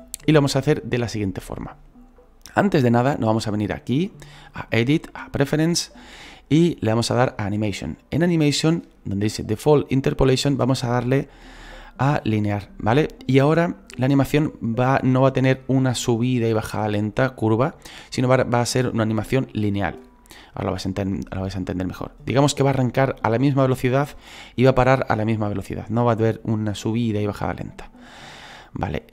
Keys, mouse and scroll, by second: 5.7-29.1 drag.